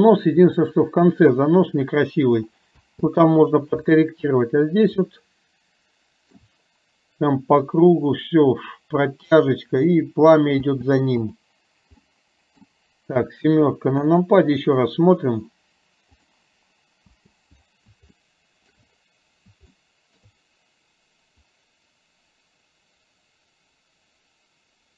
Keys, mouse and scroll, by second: 0.6-1.4 shift+middle drag, 2.8 space, 5.1-6.4 shift+middle drag, 10.7 space, 11.2 click, 12.1-12.7 middle drag, 14.1 KP_7, 16.2 click, 17.1 space, 18.1-18.8 shift+middle drag, 19.8 shift+middle click.